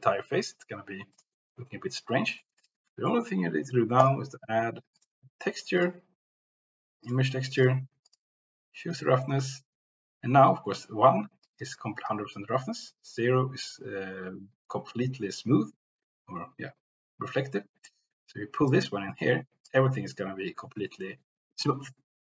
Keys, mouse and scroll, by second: 2.4 shift+middle click, 3.2 shift+middle click, 3.2 shift+click, 4.1 click, 5.0-7.7 drag, 8.1 click, 11.4 click, 12.1-17.9 drag, 18.6-19.8 drag.